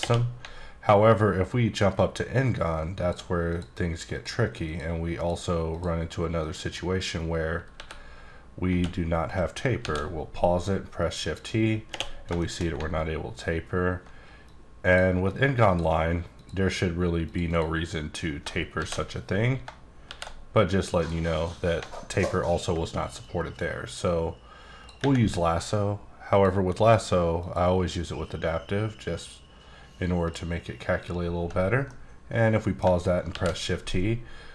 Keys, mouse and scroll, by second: 0.6-1.2 alt+scroll down 1, 1.2-2.0 alt+scroll up 2, 2.4 click, 3.5 click, 4.1 click, 4.6 click, 5.2 click, 5.7 click, 6.4 click, 6.6 double click, 7.7 e, 8.7 Tab, 9.3 shift+q, 9.8 shift+t, 11.2 click, 11.9 space, 12.4 shift+middle click, 13.0-14.1 alt+scroll up 2, 14.4 click, 15.6 click, 16.3 click, 17.2 click, 17.5 double click, 18.7 shift+t, 21.0 click, 22.1-22.7 alt+scroll up 1, 22.7 scroll up 1, 23.2 click, 26.3 click, 27.4 click, 28.4 click, 31.4 Tab, 31.9 middle click, 33.3 shift+t.